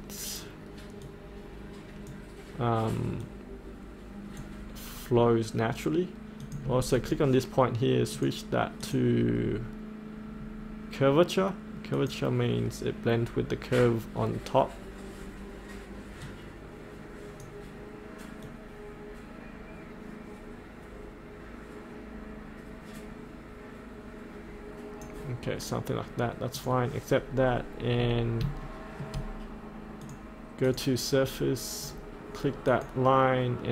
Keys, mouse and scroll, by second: 1.0-9.5 drag, 9.5-11.9 scroll down 1, 11.9-25.1 drag, 27.2 scroll up 1, 27.9-28.4 scroll up 1, 28.7 shift+middle click, 30.0 click, 31.8-32.6 scroll down 1, 32.6 click.